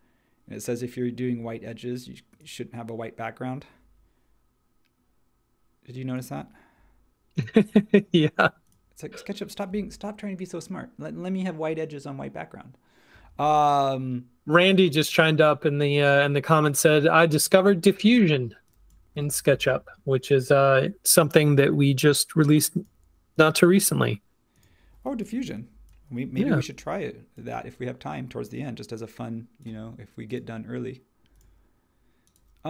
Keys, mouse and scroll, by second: 19.1 2, 19.5 Tab, 25.3 h, 26.3 h.